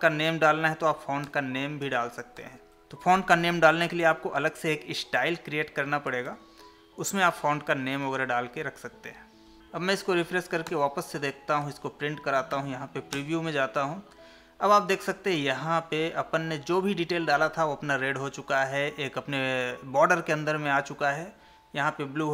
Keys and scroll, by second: 1.8 ctrl+v, 6.3 ctrl+s, 8.2 Tab, 9.6 Escape, 11.6 ctrl+p, 12.5 Left.